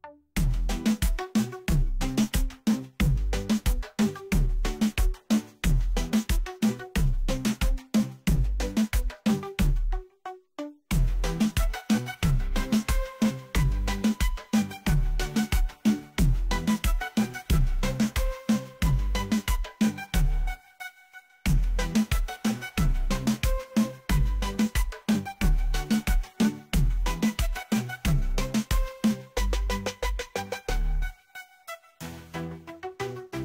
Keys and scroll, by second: 1.2 1, 1.6 ., 2.1 8, 4.8 9, 6.5 Return, 9.8 1, 10.2 ., 11.0 4, 24.8 1, 27.1-28.0 typing, 29.9 7, 31.6 Return.